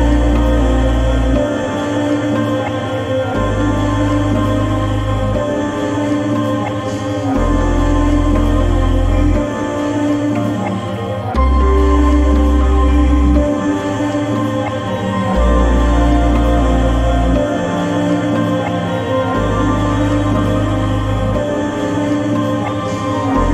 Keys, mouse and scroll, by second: 3.8 click, 3.8 click, 8.5 click, 9.4 ctrl+z, 10.4-13.2 drag, 14.6-16.2 shift+drag, 17.5-18.1 shift+click, 18.6 right click, 19.9 click.